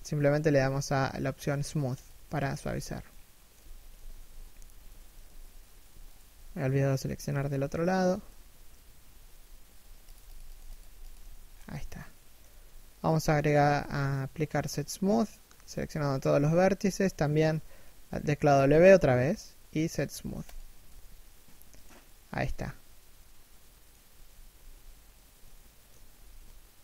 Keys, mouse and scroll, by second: 2.7 middle click, 3.3 z, 5.8 alt+right click, 6.4 middle click, 6.8 z, 6.9 middle click, 7.6 alt+shift+right click, 7.9 KP_3, 8.3 KP_1, 8.7 w, 10.4 scroll down 1, 10.6 middle click, 12.6 middle click, 13.0 a, 16.4 3, 16.9 1, 18.1 w, 20.8 middle click, 23.6 KP_3, 24.1 KP_1, 25.1 shift+middle click, 26.4 a.